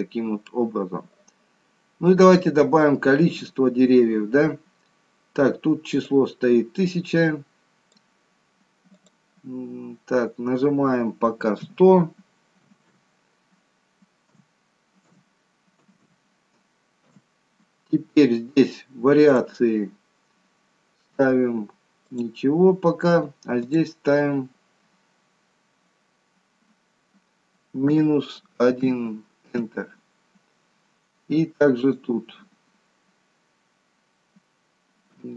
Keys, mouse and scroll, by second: 2.1-2.6 scroll up 3, 3.9-5.5 scroll down 1, 6.1 click, 9.1 click, 12.8 o, 19.2 click, 23.6 click, 31.8 click.